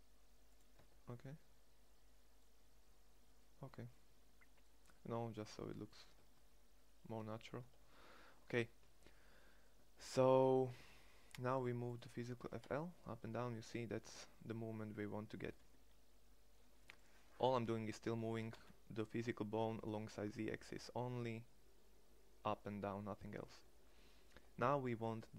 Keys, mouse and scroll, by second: 0.4 Tab, 5.8 Tab, 7.2 Tab, 12.0 g, 17.9 g, 24.8 middle click.